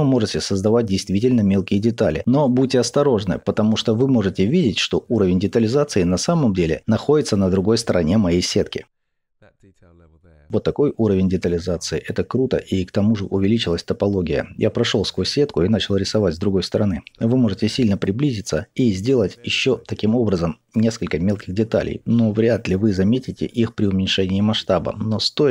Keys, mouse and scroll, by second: 1.6 scroll down 1, 2.5-3.5 scroll up 1, 4.6 scroll down 1, 4.8-8.9 middle drag, 7.5-8.1 scroll up 1, 8.9-16.5 drag, 10.6-11.8 scroll down 2, 11.8-14.6 scroll down 1, 15.2 scroll up 2, 16.5-20.4 middle drag, 17.2-17.7 scroll down 2, 18.5-20.4 scroll up 2, 20.4-25.5 drag, 23.4-24.6 scroll down 2, 24.6-25.5 scroll down 1.